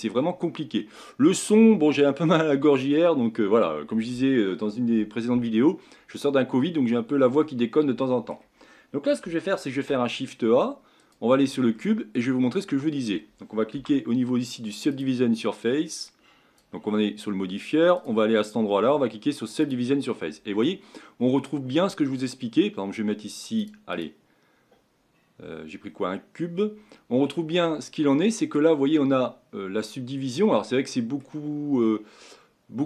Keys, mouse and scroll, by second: 7.4-9.7 middle drag, 9.7 shift+a, 11.7-13.7 middle drag, 13.7 n, 14.9 click, 16.0-21.2 drag, 21.2 scroll up 6, 23.6-25.9 drag, 25.9-27.6 scroll down 1, 27.6-32.8 middle drag.